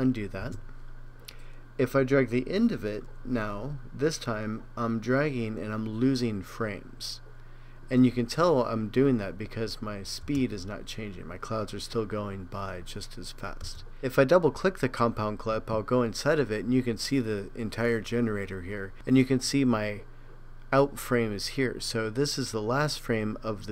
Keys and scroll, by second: 0.4 super+z.